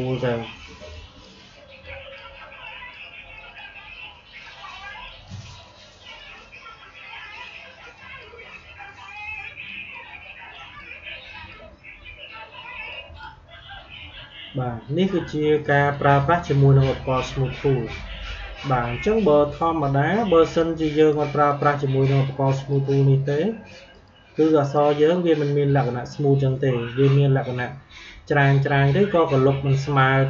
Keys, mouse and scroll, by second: 15.0 click, 15.5 click, 20.4 click, 22.5 click.